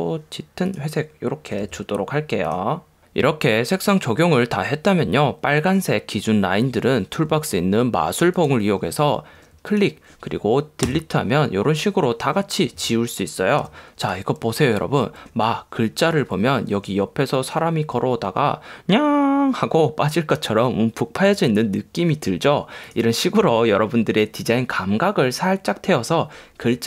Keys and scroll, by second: 11.0 BackSpace, 13.8 v.